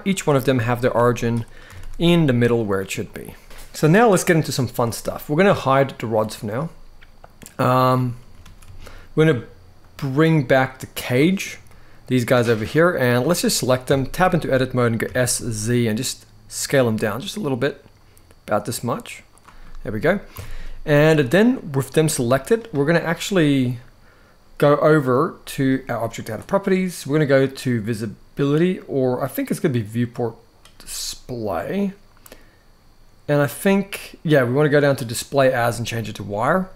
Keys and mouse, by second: 0.6 g, 1.3 r, 1.5 r, 2.3-2.7 right drag, 2.7 click, 3.4 r, 3.4 r, 5.7 click, 7.2 click, 8.2 ctrl+s, 8.4 ctrl+s, 9.5 click, 10.7 click, 11.4-11.8 middle drag, 13.6 Tab, 14.8 s, 15.1 z, 19.0 click, 19.3 middle click, 20.0 Tab, 20.8-21.2 middle drag, 21.8 g, 24.8 click, 25.9 click, 29.5 click, 32.0-33.1 drag, 36.2-36.7 middle drag.